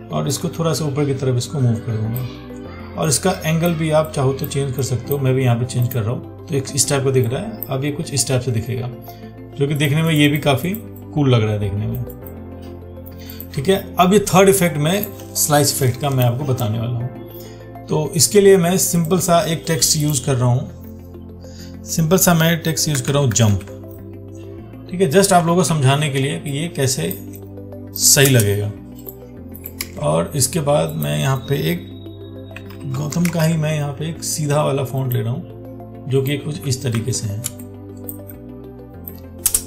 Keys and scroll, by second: 26.0 ctrl+t, 30.1 ctrl+a, 37.2 ctrl+t.